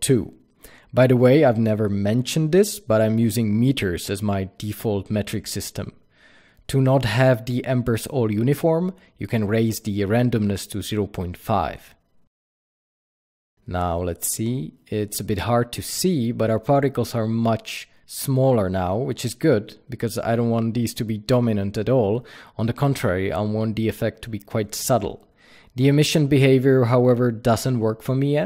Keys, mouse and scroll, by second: 6.2 KP_Enter, 7.6 click, 11.9 KP_Enter, 13.4 click, 18.8 click, 24.5-25.8 scroll up 1.